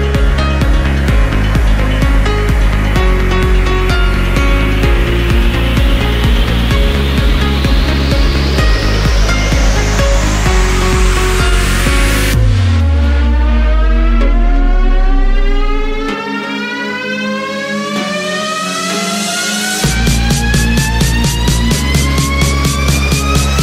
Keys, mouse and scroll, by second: 0.2-1.8 right drag, 1.8-2.1 scroll up 1, 2.1 Tab, 2.5-3.2 scroll up 4, 3.2-3.5 scroll down 1, 3.5 middle click, 4.5 scroll up 2, 4.8 middle click, 5.7-6.9 middle drag, 6.9 scroll up 1, 8.1 2, 8.6-9.7 scroll up 1, 9.7 click, 10.3 click, 10.5 click, 10.9 scroll down 2, 11.1-12.3 middle drag, 12.3-13.2 scroll up 1, 13.2-14.2 scroll up 1, 14.2-15.3 scroll up 1, 16.2 f, 16.9 3, 19.8 scroll up 2, 20.2-20.6 scroll down 5, 20.8-22.4 middle drag, 22.4-23.2 scroll up 5.